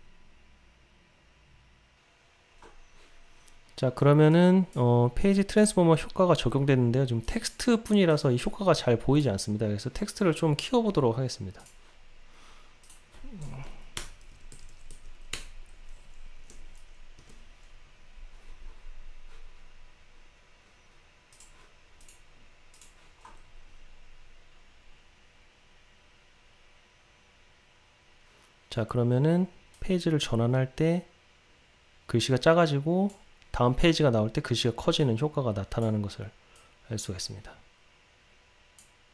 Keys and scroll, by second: 15.5 Return, 21.5 ctrl+r.